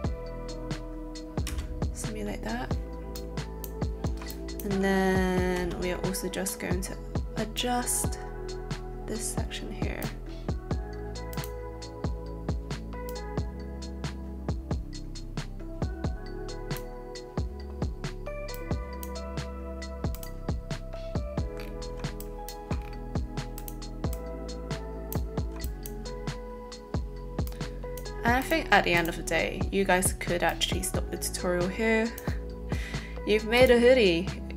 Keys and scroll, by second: 1.5 space, 5.5 space.